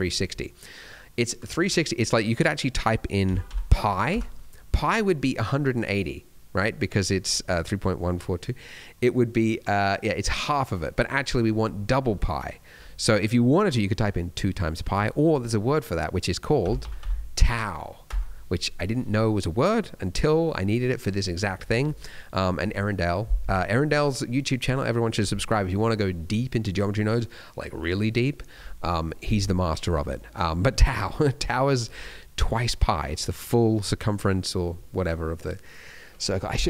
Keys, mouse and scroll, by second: 2.2 click, 13.2 click, 19.9-22.0 scroll down 1, 22.0 middle click, 22.4-22.9 scroll down 1, 29.9 scroll down 1, 30.1 middle click, 30.3-32.9 scroll up 2.